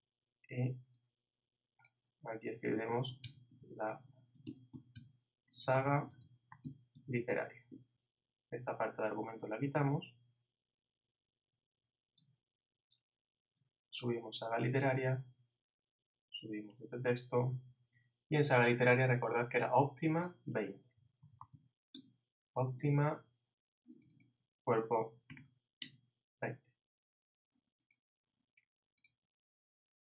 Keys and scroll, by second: 2.5-4.7 typing, 8.6 shift+Up, 8.6 shift+Right, 9.1 shift+Down, 10.3 shift+Right, 12.1 shift+BackSpace, 17.4 shift+Up.